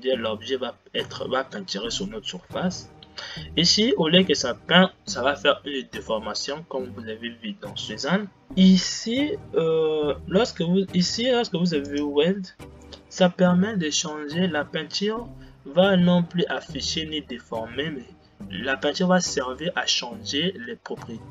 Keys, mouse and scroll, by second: 9.4-12.8 drag.